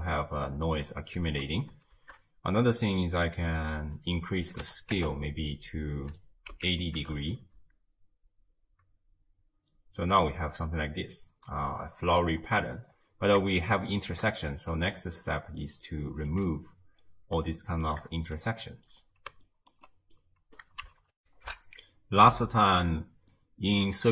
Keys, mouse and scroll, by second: 2.0 shift+space, 2.6-3.4 middle drag, 3.4-6.2 drag, 6.5 x, 7.2 shift+space, 10.1 space, 10.5-11.5 scroll down 1, 12.9 scroll up 2, 13.5-14.7 shift+middle drag, 14.7 d, 15.0 click, 15.6 d, 15.8 right click, 16.3 d, 16.4 d, 17.0-17.5 scroll down 3, 17.5-21.2 shift+middle drag, 21.2 ctrl+alt+shift+w, 22.2 ctrl+alt+shift+q, 23.3 middle click.